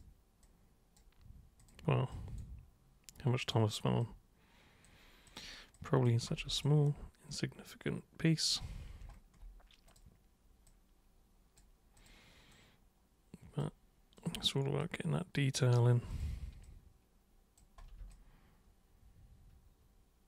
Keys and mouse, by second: 0.4-1.0 super+drag, 1.6 super+click, 2.1 super+click, 3.4 super+drag, 4.0-4.8 super+drag, 5.3 super+click, 5.7 super+click, 6.7-8.5 alt+super+drag, 9.9 super+click, 10.7-11.6 super+drag, 12.0 super+click, 12.5-13.6 super+drag, 14.2 super+click, 14.8-15.7 super+drag, 16.1 super+click, 16.6-17.5 super+drag, 18.1-20.2 alt+super+drag.